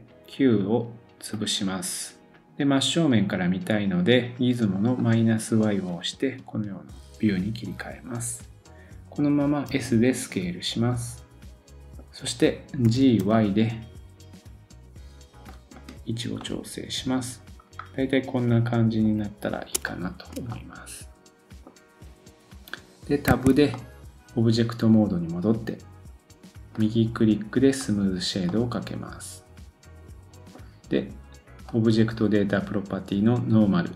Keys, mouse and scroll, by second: 1.6-5.0 drag, 5.6-8.1 drag, 6.3-7.1 scroll down 1, 8.1-9.4 scroll down 1, 9.7 s, 11.8 middle click, 11.8-12.5 scroll down 2, 12.8 g, 15.7 click, 16.3 scroll up 1, 16.4 middle click, 19.6 shift+click, 19.8 shift+middle click, 23.3 Tab, 23.6 click, 23.7 middle click, 26.0 click, 26.7 right click, 28.5 middle click, 31.6 click.